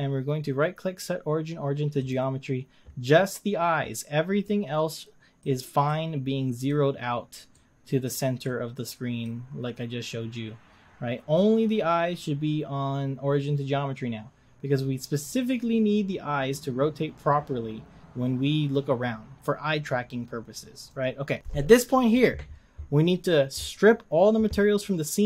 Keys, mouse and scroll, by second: 2.1-4.5 right drag, 4.5-20.9 middle drag, 20.9 click.